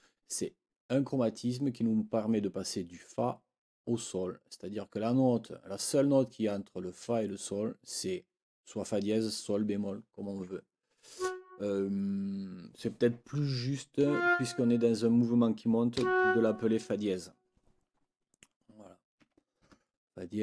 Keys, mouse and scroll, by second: 11.1 click, 14.0 Down, 15.9 Up, 19.2 Escape.